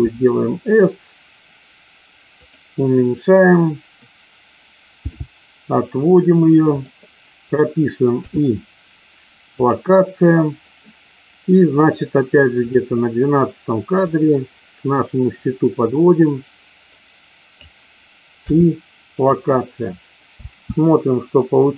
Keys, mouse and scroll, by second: 2.4 click, 5.0 g, 8.0 i, 14.0-17.6 drag, 18.4 i, 20.4 space.